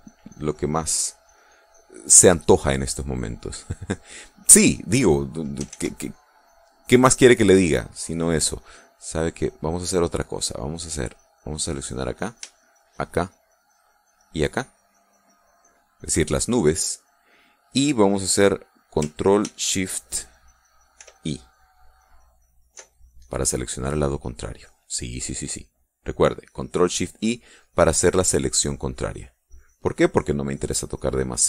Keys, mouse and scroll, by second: 1.3 click, 4.0-5.3 drag, 6.2 ctrl+z, 10.8 click, 12.0 click, 13.1 shift+click, 14.7 shift+click, 21.5 ctrl+shift+i, 26.9 click, 28.6-29.8 drag.